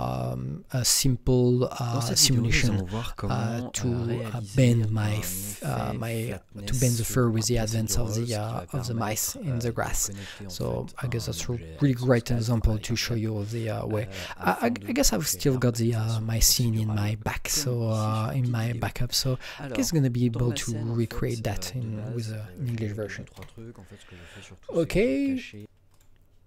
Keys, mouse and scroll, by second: 23.3 Escape, 23.3 click, 25.5 click, 25.9 click.